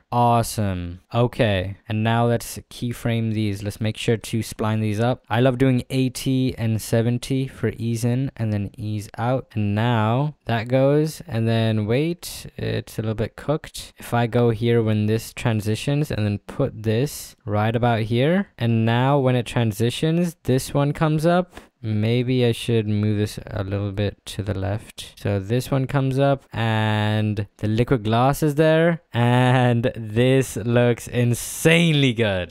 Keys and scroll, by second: 4.4 s, 4.9 t, 9.5 space.